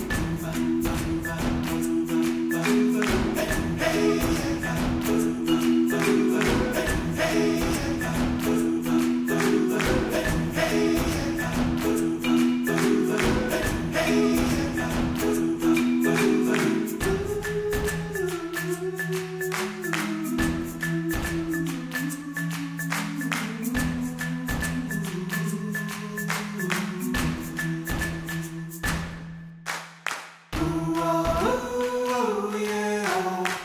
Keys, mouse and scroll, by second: 1.4 click, 1.9 g, 3.1 Tab, 3.3 ctrl+s, 3.5 middle drag, 3.7 alt+z, 3.8 scroll up 3, 4.1 alt+z, 4.7-5.7 middle drag, 5.9 Tab, 6.0-7.1 middle drag, 7.1 alt+z, 7.2 middle click, 7.5 Tab, 7.7 middle click, 8.0 KP_1, 8.2 scroll down 2, 8.3 shift+middle click, 8.5 Tab, 9.1 alt+z, 9.7 click, 10.4 g, 11.5 Tab, 12.1 Tab, 12.4 click, 12.6 g, 14.3 Tab, 15.2 middle click, 16.1 ctrl+a, 16.3 Tab, 16.4 scroll up 1, 16.7 alt+z, 16.8 shift+middle click, 17.3 ctrl+r, 17.9 Tab, 18.1 middle click, 18.9 KP_1, 19.2 shift+middle click, 19.4 click, 19.4 Tab, 19.8 scroll down 1, 20.1 Tab, 20.6 scroll down 1, 20.8 Tab, 21.0 alt+z, 21.2 click, 21.5 g, 23.1 a, 23.2 right click, 24.0 Tab, 24.4 middle drag, 24.5 alt+z, 24.7 middle click, 24.7 scroll up 2, 24.9-25.7 middle drag, 25.7 KP_1, 25.8-26.2 scroll down 1, 26.2 ctrl+s, 26.6 alt+z, 27.1 Tab, 27.4-27.8 scroll up 1, 27.8-29.1 alt+drag, 29.1-29.6 scroll up 2, 30.5 g, 32.0-33.1 scroll down 2, 33.2 alt+click.